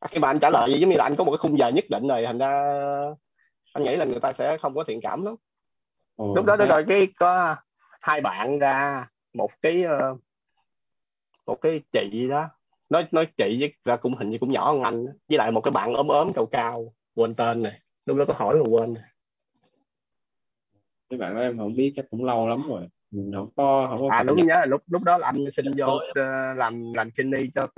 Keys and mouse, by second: 22.8 click.